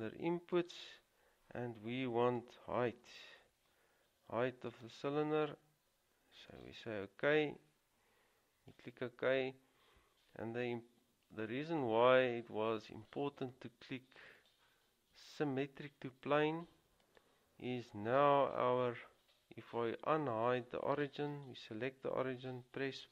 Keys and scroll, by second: 3.1 typing.